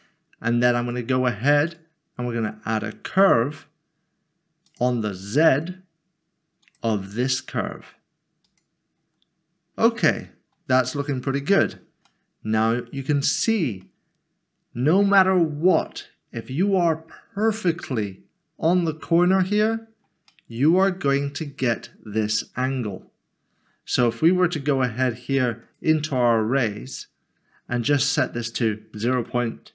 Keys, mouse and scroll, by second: 0.8 click, 3.3 click, 9.5 scroll down 1, 11.0 middle click, 12.1 shift+middle click, 13.0 shift+middle click, 13.2 scroll up 1, 13.8 shift+middle click, 20.3 middle click, 25.6 click, 27.8 click, 29.0 typing.